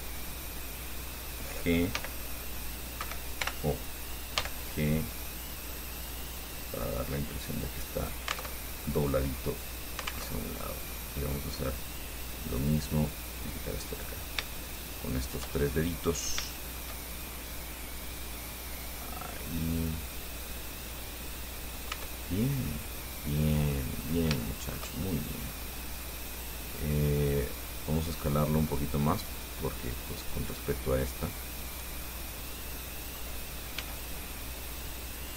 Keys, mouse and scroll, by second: 2.2 g, 3.2 Escape, 3.6 o, 4.6 g, 8.2 click, 8.7 alt+Tab, 10.5 alt+Tab, 10.8-11.9 alt+middle drag, 12.7 right click, 14.1 click, 14.9 shift+right click, 15.4 shift+right click, 15.9 shift+middle click, 16.7-17.7 shift+middle drag, 18.4-20.8 drag, 22.1 Tab, 22.6 scroll down 2, 22.9-24.2 drag, 24.2-24.5 scroll down 2, 24.6 shift+click, 25.3-30.1 shift+middle drag, 30.8-33.5 drag, 34.0 s.